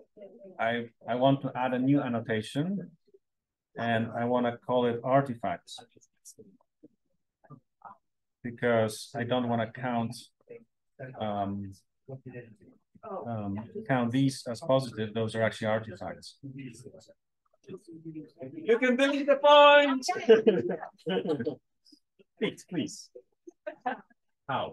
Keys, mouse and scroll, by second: 3.4 click, 5.1-8.4 typing, 9.2 click, 17.3 click, 17.7-18.6 scroll down 1, 18.6-20.8 scroll down 1, 20.8-24.7 scroll down 1.